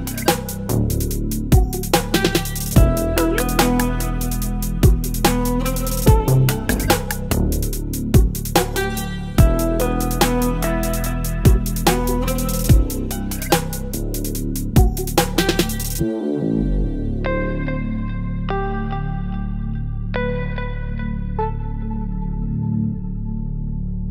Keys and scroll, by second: 5.2 v, 8.8 space, 9.7 Up, 10.8 Up, 11.0 Up, 11.2 Up, 13.9 space, 15.9 ctrl+t, 19.2 Return.